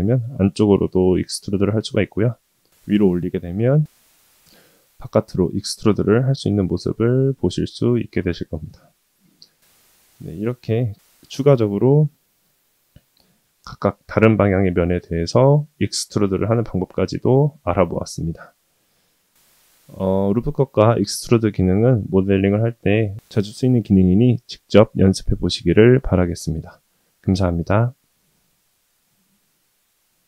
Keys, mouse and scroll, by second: 15.8-16.2 shift+middle drag, 16.5-17.4 middle drag, 17.7-18.0 middle drag, 18.5 ctrl+z, 19.1-19.5 middle drag, 19.9 ctrl+z, 21.0-21.3 shift+middle drag, 27.5-28.5 middle drag, 29.0-29.4 shift+middle drag.